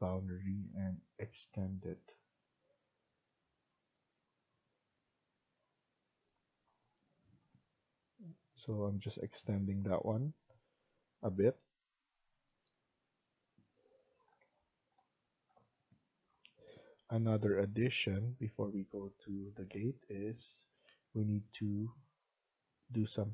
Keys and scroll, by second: 7.4 Escape.